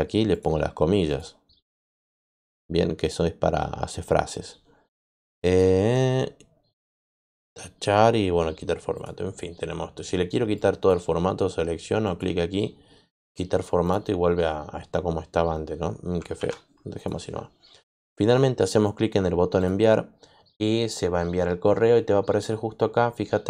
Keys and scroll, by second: 16.3 ctrl+z.